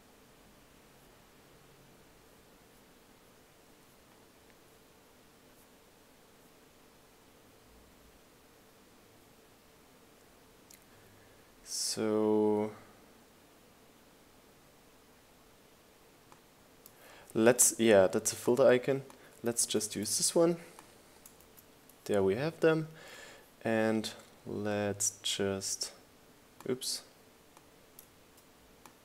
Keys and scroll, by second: 21.1 super+c, 22.6 super+v.